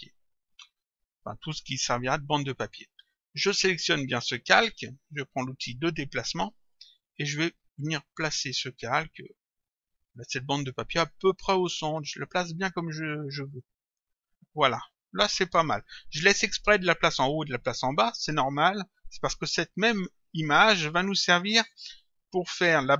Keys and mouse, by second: 0.6 click, 3.4 click, 6.8 click, 8.3 click.